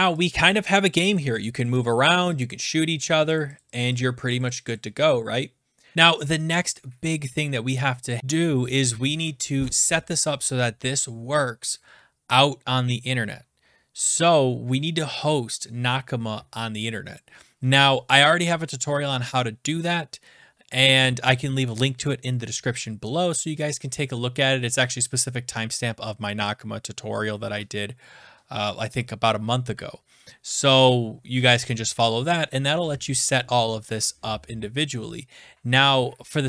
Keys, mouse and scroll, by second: 0.0 click, 0.2 click, 0.4 click, 0.7 click, 1.1 click, 1.2 Right, 1.4 click, 1.6 click, 1.7 Right, 1.7 Down, 1.8 click, 1.9 Left, 2.4 click, 3.0 Down, 3.2 Left, 3.4 click, 3.6 click, 3.8 Left, 3.8 click, 3.8 Left, 3.9 Left, 4.0 Down, 4.0 click, 4.3 Right, 4.4 click, 4.6 click, 4.7 click, 4.8 Right, 5.9 alt+click, 8.2 click.